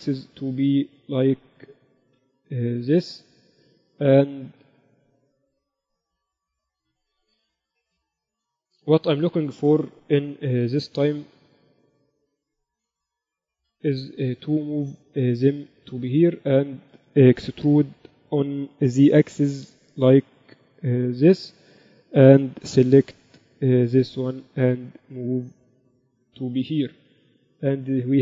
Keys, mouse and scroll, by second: 0.0 s, 2.1 s, 5.8-7.6 drag, 6.9 s, 8.4 KP_1, 10.5 KP_1, 11.4 Tab, 12.0 a, 13.6 a, 14.2 a, 14.5 b, 15.8-17.5 drag, 16.4 a, 17.7 a, 17.9 a, 18.4 a, 19.2 e, 22.7 a, 23.6 b, 25.4-27.2 drag, 27.2 Tab.